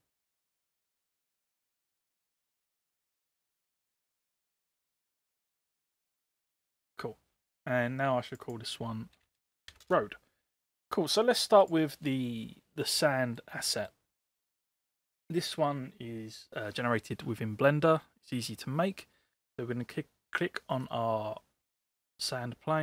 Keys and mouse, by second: 0.3-2.6 drag, 5.4-6.7 drag, 8.3 click, 8.4-10.6 drag, 11.6 click, 12.9-13.5 middle drag, 13.7 middle drag.